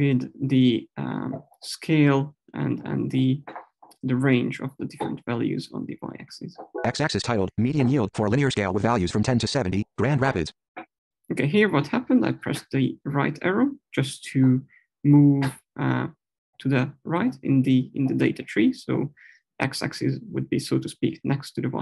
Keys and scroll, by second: 6.6 Right.